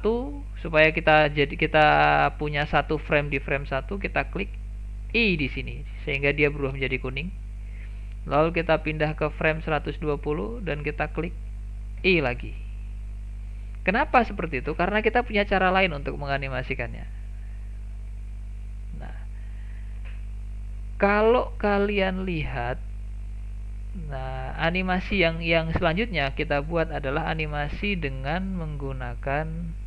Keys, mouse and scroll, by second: 9.5-12.0 drag, 14.3-14.9 scroll down 5, 14.9-15.6 shift+middle drag, 15.6-16.4 scroll down 1, 16.4-16.9 shift+middle drag, 16.9-17.9 scroll down 2, 17.9-18.3 scroll up 1, 18.3-21.6 shift+middle drag, 21.6 click, 23.3 click.